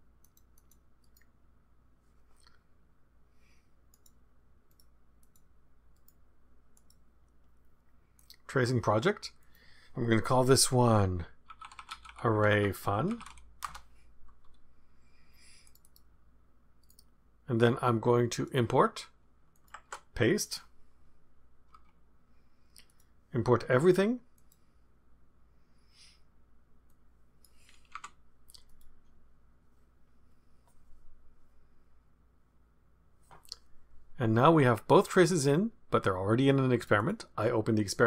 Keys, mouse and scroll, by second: 0.2 click, 1.0 right click, 3.9 click, 4.7 click, 5.2 click, 5.9 right click, 6.7 click, 8.1 click, 9.4 click, 11.2-13.7 typing, 15.6 click, 16.8-18.3 right drag, 18.3 click, 19.5 click, 19.8 ctrl+v, 21.7 Return, 22.8 click, 24.3 click, 26.8 click, 28.0 BackSpace, 28.6 click, 35.3 click, 36.8 click.